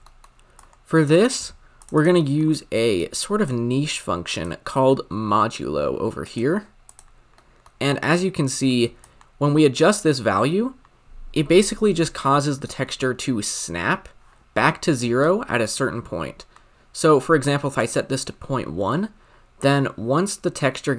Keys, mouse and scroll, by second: 0.1 middle click, 0.5 drag, 1.9-4.2 drag, 6.3-6.9 drag, 7.3 middle click, 7.9-9.3 scroll up 3, 9.3-12.1 shift+drag, 15.6-20.9 shift+drag.